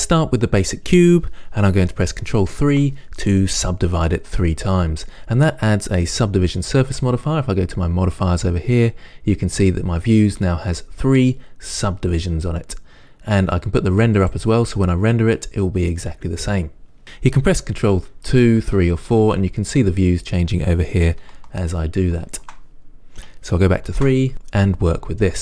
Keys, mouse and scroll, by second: 2.9 ctrl+3, 6.2 click, 14.4 click, 18.3 ctrl+2, 18.8 ctrl+3, 19.3 ctrl+4, 21.5 ctrl+2, 21.9 ctrl+3, 22.4 ctrl+4, 24.1 ctrl+3, 25.2 scroll up 1.